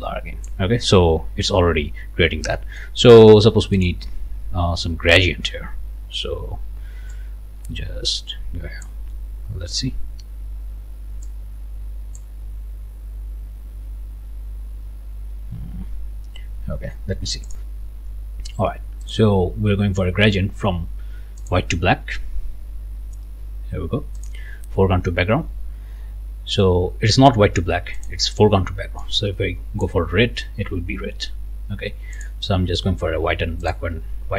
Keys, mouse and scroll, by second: 0.7 scroll down 1, 2.2 scroll up 1, 2.6 click, 3.7 click, 7.1-9.0 drag, 11.2-12.4 drag, 17.5 click, 19.1 click, 21.4 click, 24.2 click, 28.0 click, 29.0-30.0 drag, 32.1 click, 33.6 click.